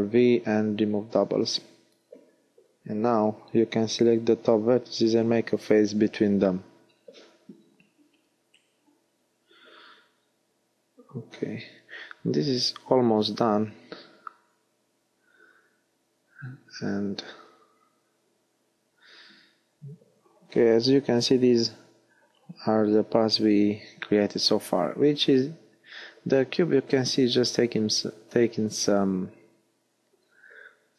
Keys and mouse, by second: 0.8-5.6 drag, 4.8 f, 7.2 middle click, 10.8 middle click, 13.4-15.0 middle drag, 19.2 alt+h, 23.2 middle click, 25.4 g, 26.2 middle click, 28.8 g, 29.8 click, 30.5 g.